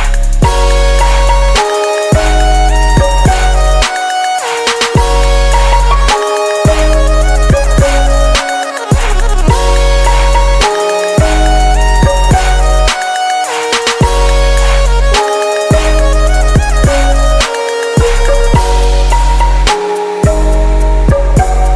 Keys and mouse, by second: 0.6 shift+s, 4.7 shift+a, 11.0-14.9 middle drag, 14.9-17.7 drag, 18.2-19.9 drag.